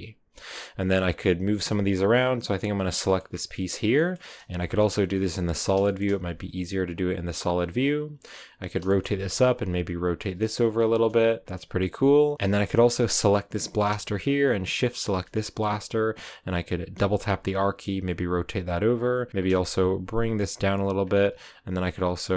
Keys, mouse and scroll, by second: 2.1 right click, 3.0 scroll down 1, 3.1 middle click, 3.6 scroll up 2, 4.7 middle click, 5.4 z, 5.7 shift+middle click, 6.1 r, 8.5 right click, 8.7 shift+middle click, 9.2 r, 10.8 KP_0, 11.4-11.9 scroll up 1, 11.9 right click, 12.3-16.9 shift+right drag, 16.9 r, 19.3-19.6 scroll up 2, 19.6 g, 20.9-22.1 scroll down 1, 22.1-22.3 right drag.